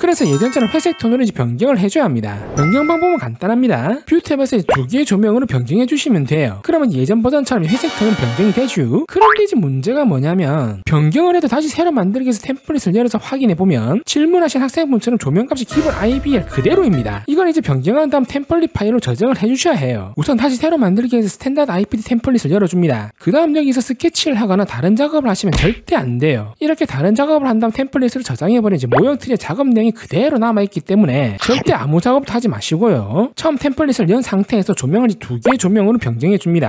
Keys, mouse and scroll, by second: 3.0 click, 5.4 click, 11.3 click, 13.5 click, 14.5 click, 15.3 click, 20.1 click, 21.2 click, 23.0 click, 23.4 click, 23.9 click, 26.2 click, 34.1 click, 34.9 click, 36.3 click.